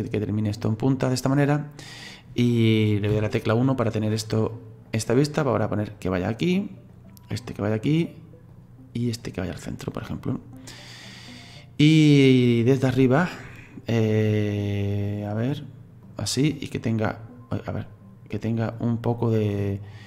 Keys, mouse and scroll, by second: 3.1 KP_1, 4.9 right click, 6.9 right click, 9.2 right click, 10.7-12.9 middle drag, 12.9 KP_7, 14.2 right click, 16.8 click, 17.8 right click, 19.6 right click.